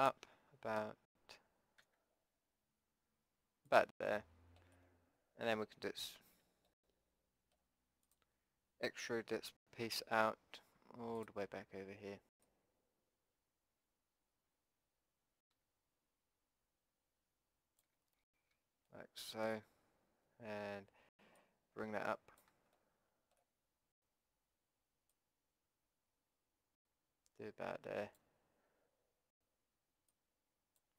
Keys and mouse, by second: 4.1-7.3 middle drag, 8.1-14.4 drag, 9.8 e, 18.2-19.4 drag, 21.4-22.8 drag, 22.8 middle click, 25.1-27.1 drag, 27.1-30.1 middle drag, 30.1-30.9 drag.